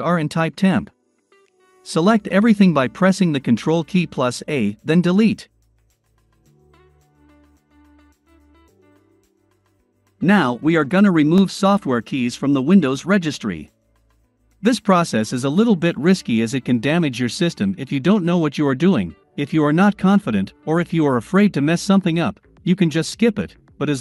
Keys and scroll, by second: 3.0 ctrl+a.